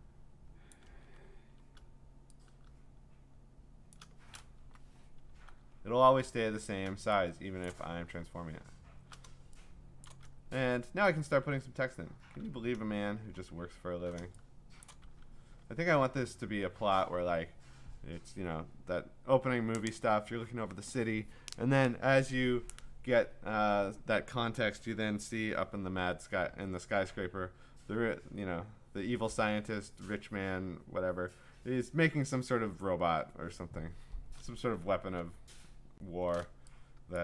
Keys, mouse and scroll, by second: 0.7 ctrl+click, 0.9 ctrl+z, 4.6 Return, 5.3-5.7 scroll down 4, 5.7-6.2 scroll, 6.0-7.1 typing, 9.0 scroll, 9.9-13.1 scroll, 10.1 click, 13.3-13.8 scroll, 14.8 click, 15.2 t, 15.6-17.9 scroll, 34.4-36.2 scroll, 34.8 ctrl+space.